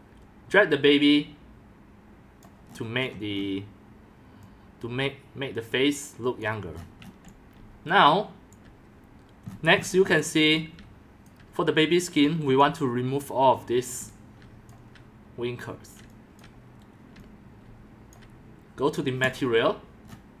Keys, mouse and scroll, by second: 0.1-2.7 drag, 2.7-3.1 scroll down 6, 3.1 scroll up 10, 3.3-4.6 scroll down 4, 4.6 scroll up 4, 6.4 click, 6.8 scroll up 6, 7.0-8.5 middle drag, 7.2-8.8 typing, 9.4-10.5 scroll up 20, 10.2-12.7 typing, 11.3 click, 11.8 click, 12.2-17.5 drag, 14.0 x, 14.5 c, 16.0 x, 17.1-18.3 typing, 17.7 click, 18.2 click, 20.1-20.4 scroll down 6.